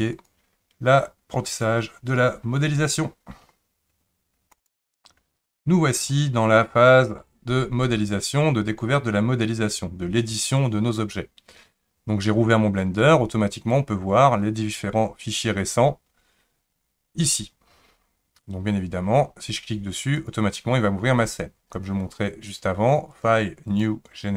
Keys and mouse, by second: 4.7-20.4 drag, 23.2-24.3 drag.